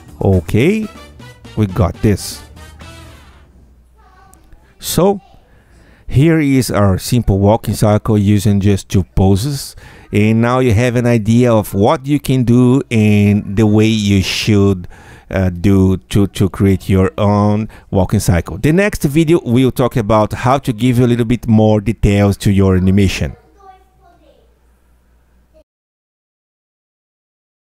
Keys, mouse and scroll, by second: 0.3 Tab, 1.0 click, 2.0 Tab, 2.9 space, 27.0 click, 27.6 click.